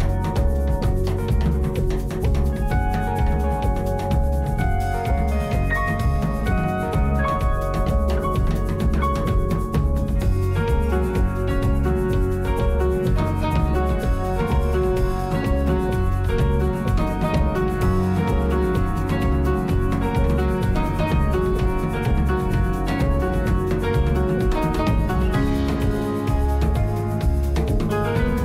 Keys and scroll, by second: 6.0 alt+d, 6.4 x, 8.4 1, 10.7 g, 19.4 alt+a.